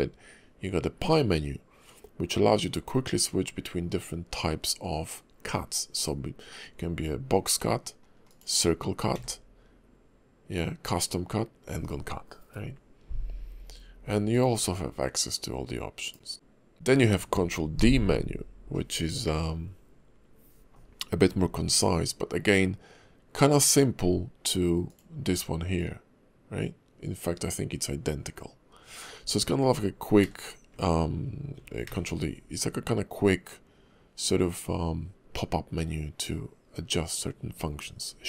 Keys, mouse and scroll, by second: 9.1 d, 16.7 ctrl+d, 24.9 click, 30.2 alt+d, 31.8 ctrl+d.